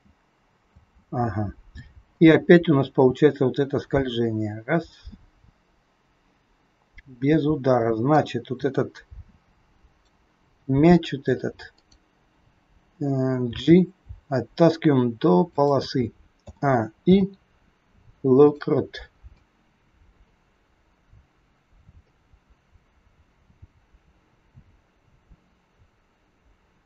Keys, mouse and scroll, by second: 0.6 space, 2.1 click, 10.0 click, 11.6 click, 13.4 g, 16.4 a, 17.0 i, 19.4 click.